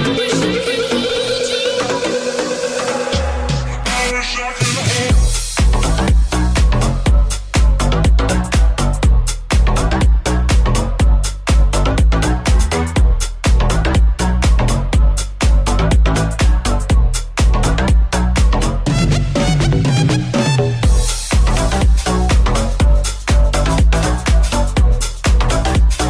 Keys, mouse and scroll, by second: 0.5-4.8 middle drag, 4.8 right click, 4.9-6.3 shift+middle drag, 7.3 middle click, 7.4-11.6 middle drag, 8.6 g, 9.4 s, 11.1 r, 12.1-26.0 shift+middle drag, 12.1 w, 13.4 g, 14.4 r, 16.9 g, 17.9 r, 18.5 g, 19.3 s, 19.9 r, 23.6 s.